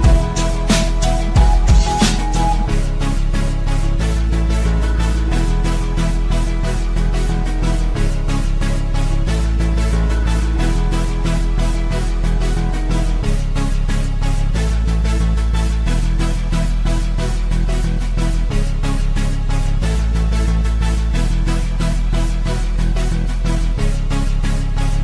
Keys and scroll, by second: 2.6 d, 4.1 f, 5.0 x, 8.8 Delete, 10.9 shift+Home, 11.3-13.3 typing.